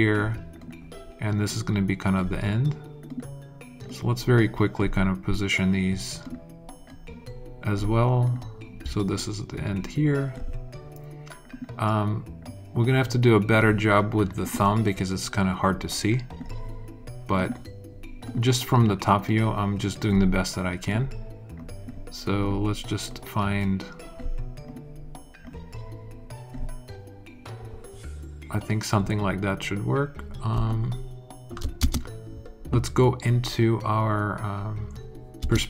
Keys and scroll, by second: 31.7 alt+space, 32.6 space, 35.3 space.